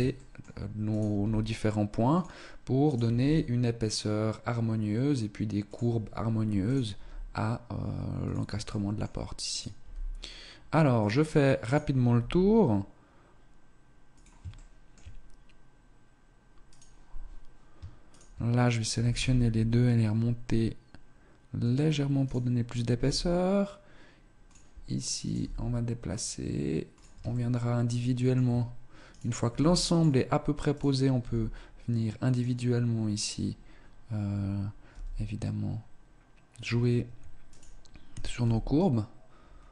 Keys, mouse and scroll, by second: 0.5 shift+middle click, 0.5 right click, 0.5 g, 2.9 g, 6.5 right click, 6.8 g, 8.1 shift+middle click, 9.0 right click, 9.0 g, 11.5 right click, 12.0 g, 14.4 shift+middle click, 16.1 right click, 17.9 shift+right click, 18.8 g, 22.1 right click, 22.9 g, 25.1 right click, 25.3 g, 27.2 shift+middle click, 28.7 right click, 28.7 g, 30.0 right click, 31.1 g, 33.1 right click, 34.7 g, 37.3 right click, 38.3 g.